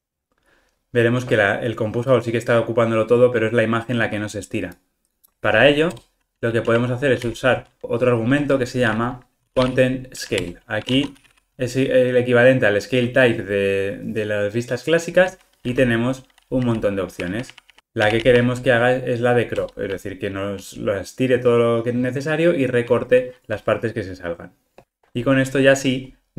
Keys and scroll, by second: 10.4 Return, 19.7 Return, 24.8 ctrl+r.